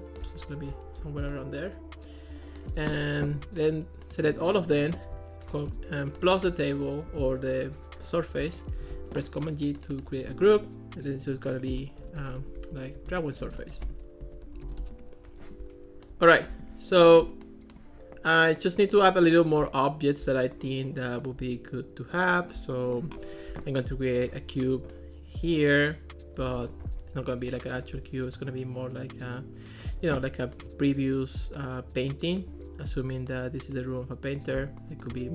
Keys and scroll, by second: 8.8 super+g, 11.8-15.3 typing.